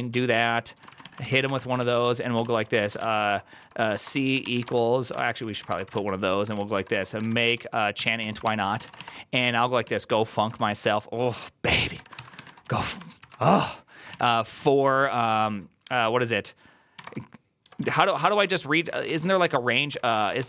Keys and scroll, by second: 0.0-14.5 typing, 16.8 i, 18.4-20.4 typing.